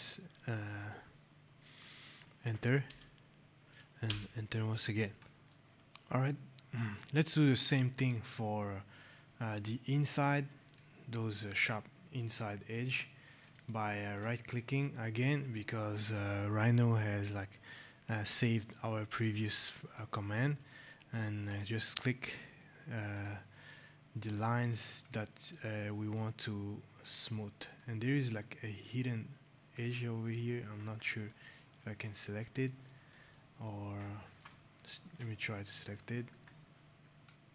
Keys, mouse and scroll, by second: 1.7 click, 2.8 Return, 5.4 right click, 5.5 click, 7.6 right click, 9.6 right click, 10.6 click, 12.1 right click, 14.5 right click, 19.9 right click, 21.4 click, 23.6 right click, 24.9 click, 25.4 right click, 26.9 click, 27.7 right click, 28.0 click, 29.7 click, 30.4 scroll, 31.2 right click, 31.3-31.9 scroll, 32.2 right click, 32.7 right click, 33.2 right click, 33.9 scroll, 34.4 shift+right click, 35.3 right click, 36.1 scroll, 37.1 click, 37.3-37.5 scroll.